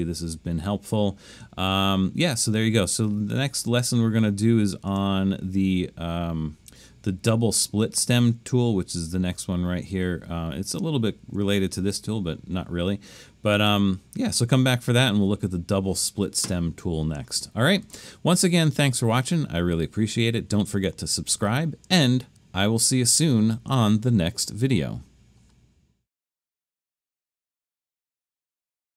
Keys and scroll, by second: 24.2 typing.